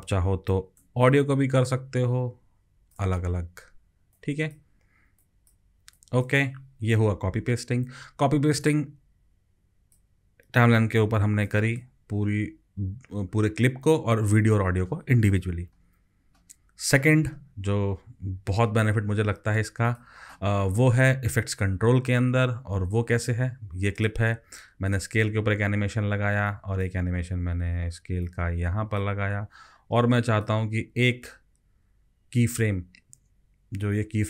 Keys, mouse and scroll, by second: 1.7 alt+click.